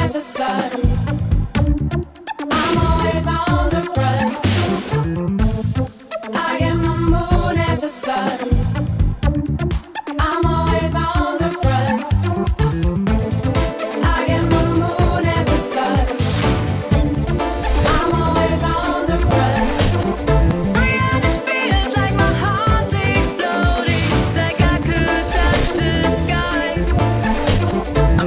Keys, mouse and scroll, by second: 12.3 click, 12.9-13.7 drag, 15.5 Print, 15.8 Print, 16.1 Print, 16.2-28.2 drag.